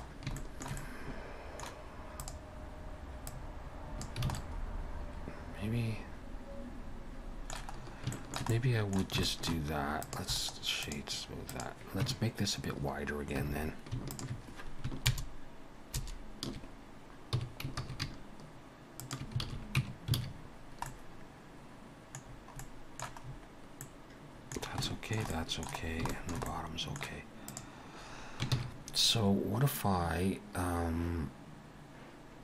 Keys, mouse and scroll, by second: 0.1 scroll down 1, 0.4 shift+middle click, 0.8 middle click, 2.2 click, 3.4 click, 4.3 alt+a, 4.4 middle click, 7.8-8.1 scroll up 2, 8.1 shift+middle click, 8.5 middle click, 9.3 shift+middle click, 10.1 click, 10.4 right click, 11.5 click, 12.0 Tab, 13.4 3, 14.1 alt+shift+click, 15.1 ctrl+KP_Add, 16.4 ctrl+KP_Add, 17.3 s, 19.5 alt+a, 19.8 Tab, 20.2 alt+a, 20.6 scroll down 1, 20.9 middle click, 22.3-22.6 scroll down 3, 22.6 middle click, 23.3 scroll up 4, 23.8 middle click, 24.9 shift+middle click, 25.3 middle click, 25.9 scroll down 1, 26.1 shift+middle click, 26.5 middle click, 27.5 click, 28.6 ctrl+s.